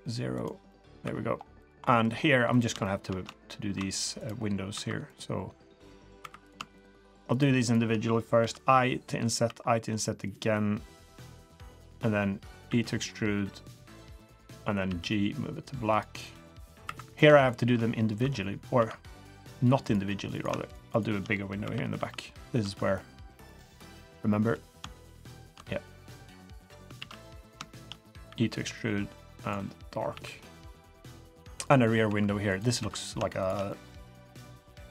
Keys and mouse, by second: 0.7 middle drag, 1.0 3, 1.8 middle click, 2.5 click, 2.8 shift+drag, 4.1 click, 4.7 2, 5.0 click, 6.2 3, 7.0-7.4 shift+drag, 7.6 shift+click, 8.4 i, 11.9-12.4 middle drag, 12.6 e, 14.8 g, 16.2 middle click, 16.8 3, 17.0 click, 17.3 shift+click, 18.2 i, 24.3 middle drag, 25.3 shift+click, 26.0 click, 26.9 ctrl+z, 27.1 click, 27.7 shift+drag, 28.2 e, 30.1 g, 31.2 middle click, 31.7 3, 32.0 2, 32.5 click, 32.8 2, 33.0 click, 33.7 middle click, 34.2 click.